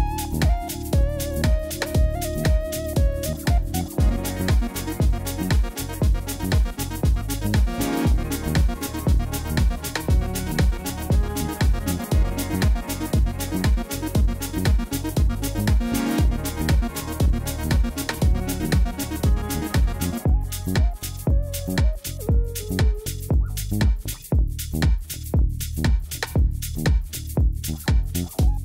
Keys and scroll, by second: 0.0 Return, 0.5 g, 0.6 z, 7.8 Tab, 8.1 shift+a, 8.8 Tab, 9.2 s, 9.5 5, 9.6 Return, 10.4 g, 10.5 z, 12.5 Tab, 14.3 alt+a, 14.5 c, 15.5 Return, 15.6 g, 15.7 z, 18.4 alt+a, 18.5 c, 19.0 Return, 19.3 s, 21.0 alt+a, 21.2 c, 22.2 Return, 22.6 g, 22.8 z, 26.4 alt+a, 26.8 c, 27.6 Return, 27.7 g, 27.8 z.